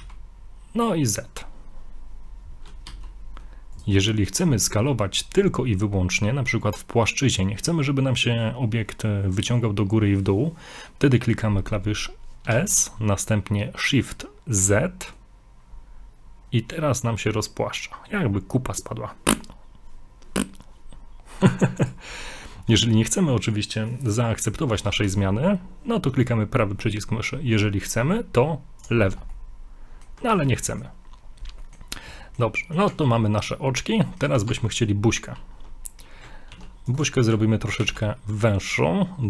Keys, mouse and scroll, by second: 4.1 middle click, 4.5 scroll up 1, 12.5 s, 24.9 s, 29.3 middle click, 30.3 ctrl+z, 30.6 ctrl+z, 30.7 middle click, 31.2 scroll up 1, 31.6 middle click, 31.8 middle click, 31.9 scroll up 1, 32.2 shift+middle click, 32.6 middle click, 32.9 middle click, 32.9 Tab, 33.6 scroll up 1, 34.0 middle click, 34.5 ctrl+Tab, 35.8 middle click, 37.8 ctrl+r.